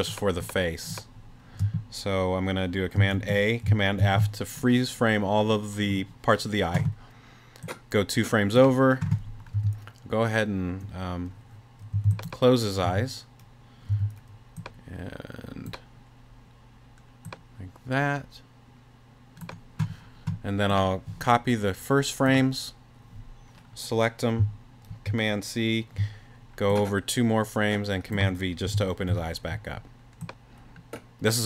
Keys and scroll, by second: 3.1 super+a, 4.0 super+f, 9.5 t, 11.9 b, 12.8 t, 14.6 t, 24.9 super+c, 28.7 super+v.